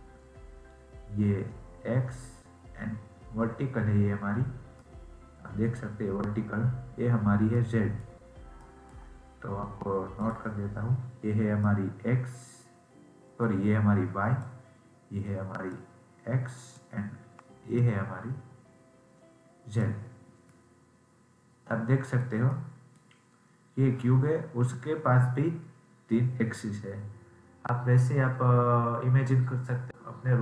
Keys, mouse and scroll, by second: 4.7-8.2 middle drag, 8.2-8.5 scroll down 1, 8.5-10.1 middle drag, 10.1-14.6 drag, 15.6-20.0 drag, 20.0-20.5 scroll down 3, 20.5-25.5 middle drag.